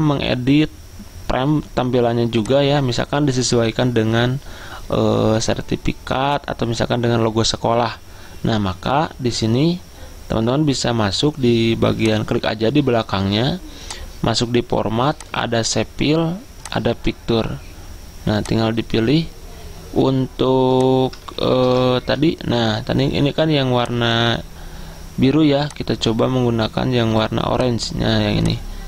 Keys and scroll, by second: 21.7 ctrl+v, 22.1 Return.